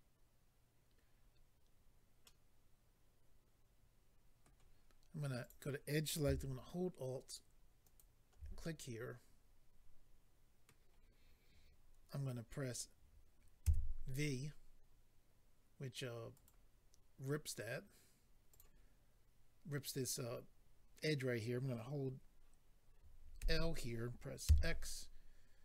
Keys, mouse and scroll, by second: 2.2 middle click, 5.4 click, 7.8 alt+click, 8.0 alt+click, 8.6 middle click, 16.3 right click, 16.4 right click, 18.5 click, 18.5 click, 23.4 l, 24.4 x.